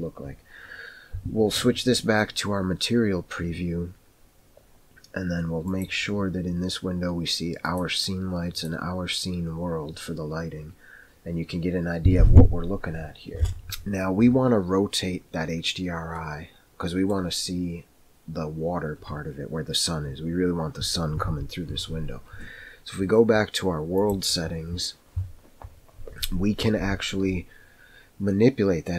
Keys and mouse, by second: 5.7-10.2 drag, 16.2-17.2 middle drag, 24.0 click.